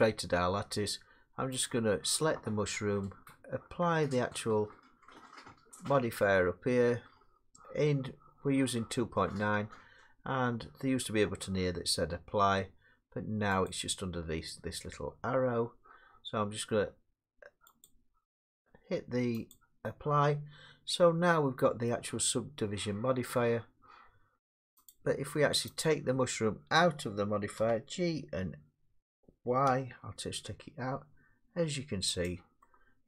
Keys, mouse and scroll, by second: 0.9 Tab, 1.6 click, 13.7 click, 17.9 click, 19.5 click, 21.9 middle click, 24.9 click, 25.8 click, 27.6 g, 29.7 y, 32.3 click.